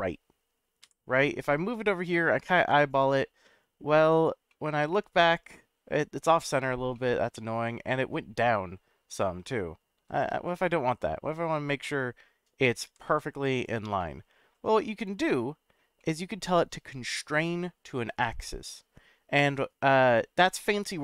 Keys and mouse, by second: 0.8 g, 2.9-3.8 drag, 4.5-6.3 middle drag, 6.9 middle click, 7.9 middle drag, 9.9 ctrl+z, 10.5-11.7 middle drag, 12.8 g, 13.1 z, 13.5 click, 14.0-15.8 middle drag, 16.0-16.3 middle drag.